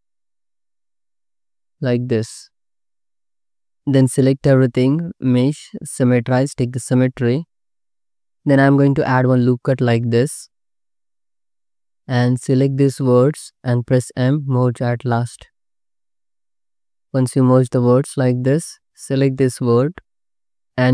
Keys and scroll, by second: 0.8 space, 1.9 space, 3.9 a, 6.5 c, 8.6 ctrl+r, 12.1 1, 14.3 m, 17.5 Escape, 17.7 m, 20.4 alt+z.